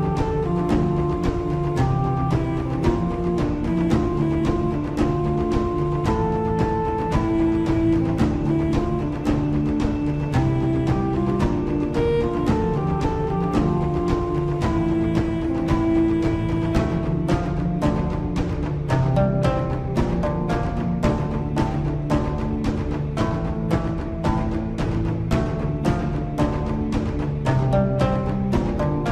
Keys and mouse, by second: 1.7 click, 3.4 click, 6.5 s, 9.8 g, 13.2 s, 18.2 z, 19.4-20.7 middle drag, 22.4-23.5 middle drag, 25.9 click, 27.7 ctrl+KP_1.